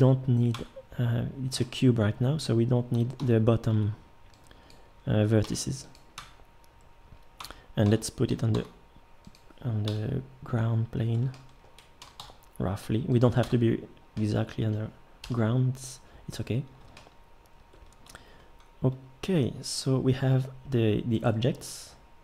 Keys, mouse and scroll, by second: 0.5 Tab, 3.2-3.7 middle drag, 3.2 a, 3.7 b, 5.4 x, 6.2 Tab, 7.9 a, 8.3 g, 9.9 KP_1, 12.0 g, 13.4 Tab, 15.2 KP_7, 16.4 middle click.